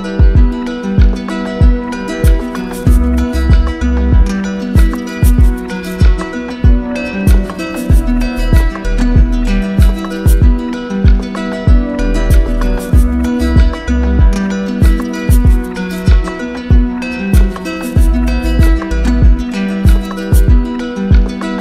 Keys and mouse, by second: 0.2 click, 2.0 shift+click, 2.8 click, 3.1 ctrl+z, 4.2 click, 4.7 alt+click, 7.5 click, 9.4-10.5 drag, 11.3-12.4 drag, 16.1-17.2 drag, 17.7-18.8 drag.